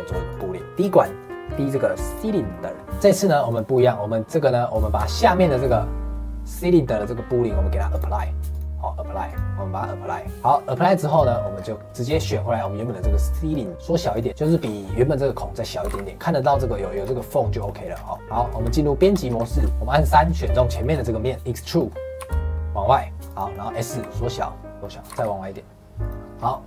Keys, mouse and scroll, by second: 2.4 middle click, 2.8 click, 2.9 middle click, 3.4 click, 3.7 click, 4.7 click, 4.9 click, 7.9-10.4 drag, 10.4 shift+middle click, 10.7 scroll down 1, 10.8 scroll up 1, 11.0 click, 11.3 middle click, 11.5-12.2 scroll up 2, 12.2-13.7 middle drag, 13.7 s, 14.3-15.8 shift+middle drag, 15.8 g, 17.6 middle click, 17.9-18.3 scroll down 4, 18.1 middle click, 18.3 middle click, 18.6 Tab, 19.1 shift+middle click, 19.3-19.6 scroll up 1, 19.6 3, 19.9 click, 20.7-22.1 shift+middle drag, 22.1 e, 23.4 middle click, 23.9 s, 24.8 middle click, 25.0 g, 26.5 middle click.